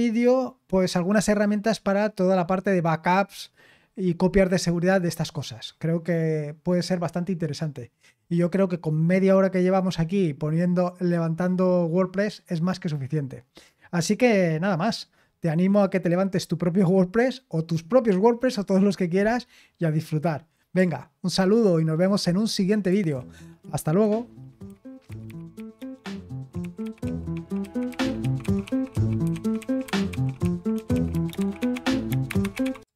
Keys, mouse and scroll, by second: 22.9 super+x, 32.8 click.